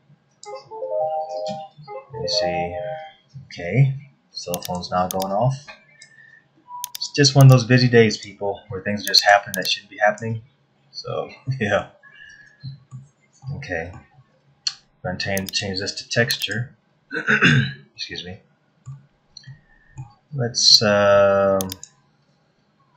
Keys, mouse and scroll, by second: 4.6 click, 5.2 click, 6.9 click, 7.5 click, 9.1 click, 9.6 click, 11.4 middle click, 12.4 middle click, 13.4 middle click, 14.6-15.1 scroll up 3, 15.4 click, 17.9 middle click, 19.4 middle click, 21.6 click.